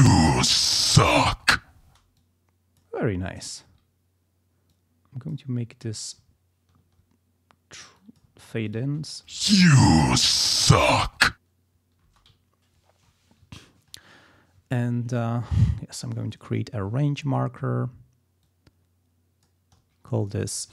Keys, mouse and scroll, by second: 0.0 click, 0.4 click, 1.9 space, 2.2 click, 3.6 ctrl+scroll up 2, 4.7 click, 5.9 ctrl+click, 6.3 ctrl+scroll down 2, 6.8 ctrl+scroll up 2, 8.0 ctrl+click, 8.3 ctrl+scroll down 1, 8.7 ctrl+click, 8.8 ctrl+space, 12.1 space, 12.4 ctrl+scroll up 2, 12.7 ctrl+scroll down 2, 13.5 ctrl+scroll up 2, 14.9 ctrl+scroll up 2, 18.4-19.6 ctrl+drag, 20.2 ctrl+click.